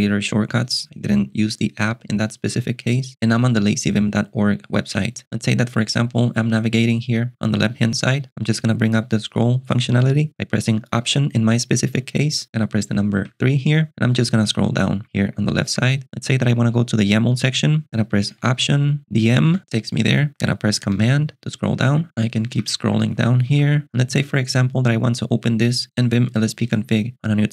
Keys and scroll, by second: 11.9 ctrl+alt+shift+super+6, 13.2 3, 14.7 j, 18.4 alt+super+BackSpace, 19.1-20.1 typing, 21.0 ctrl+alt+shift+super+6, 21.9 j, 22.8 j, 23.5 j, 23.8 k.